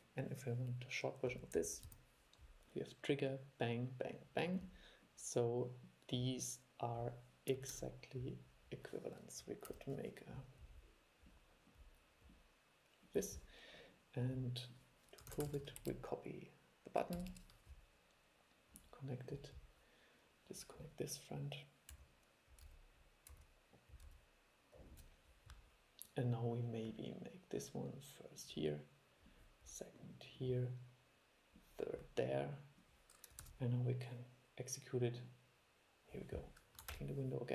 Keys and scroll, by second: 7.9 super+5, 15.5 super+c, 15.7 super+v, 33.6 super+e, 37.1 shift+super+l.